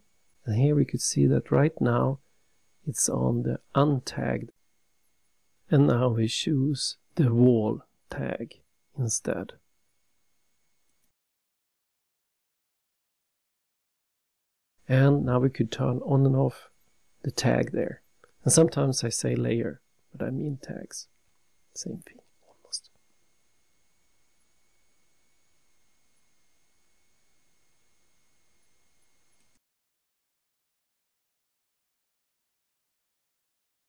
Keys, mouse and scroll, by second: 2.8 click, 8.9 click, 11.0 click, 15.8 click, 18.3 click, 20.4 scroll down 3, 21.3 scroll down 1.